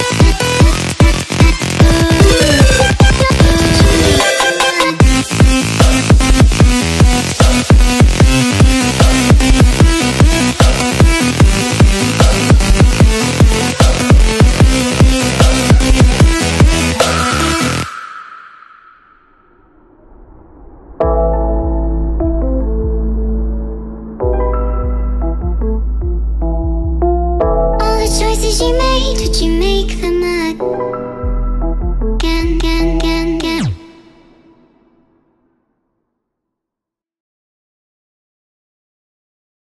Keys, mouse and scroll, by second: 0.1 click, 6.3 click, 6.9 click, 7.1 click, 8.4 click, 9.7 click, 10.2 click, 10.4 click, 11.1 ctrl+click, 11.3 click, 11.9 click, 16.3 click, 18.5 Return, 18.6 Return, 19.2 Caps_Lock, 19.4-20.5 typing, 21.8-24.6 typing.